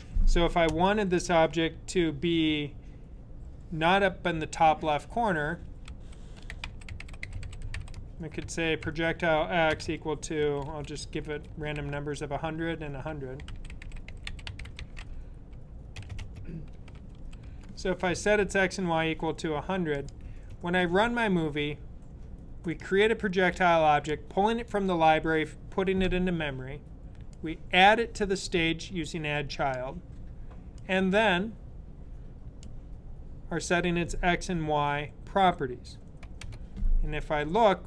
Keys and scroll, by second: 5.2-17.7 typing.